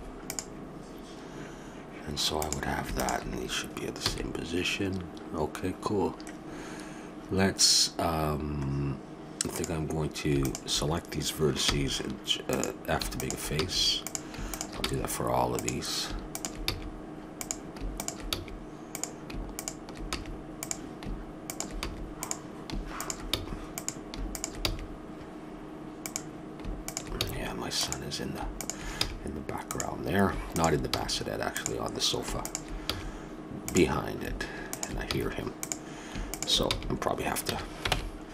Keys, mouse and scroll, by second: 4.0 a, 4.8-6.0 middle drag, 9.5-12.2 drag, 11.6 f, 12.5-17.8 drag, 13.6 f, 14.8 f, 16.7 f, 18.3 f, 20.1 f, 21.8 f, 23.3 f, 24.7 f, 27.2 f, 29.0 f, 30.9 f, 32.9 f, 35.1 f, 36.7 f, 37.5 a, 37.9 ctrl+Tab.